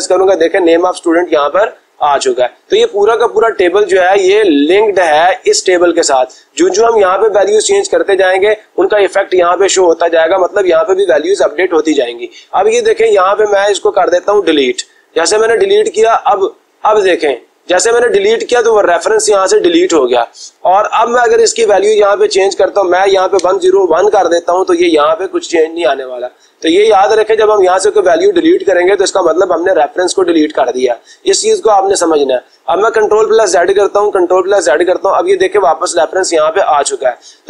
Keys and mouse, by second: 5.4 click, 12.9 click, 14.2 Delete, 16.5-17.5 drag, 18.3-19.5 drag, 21.6 click, 22.0 click, 23.4 0, 23.6 Return, 25.9 click, 33.6 ctrl+z, 36.2 click, 36.8 click, 37.3 click.